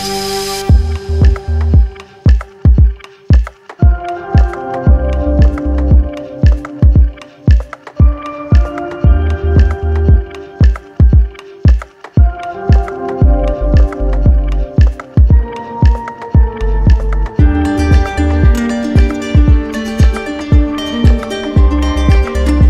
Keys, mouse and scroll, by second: 0.6 right click, 1.3 alt+right click, 2.7 right click, 3.9 right click, 5.2 right click, 6.3 shift+right click, 11.0 click, 12.9-14.0 drag, 17.7 z, 22.5 click.